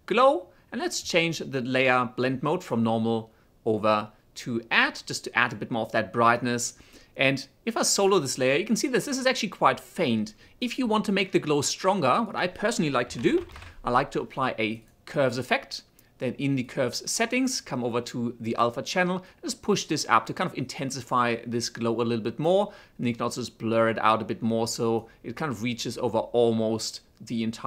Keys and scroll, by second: 12.6-14.5 typing.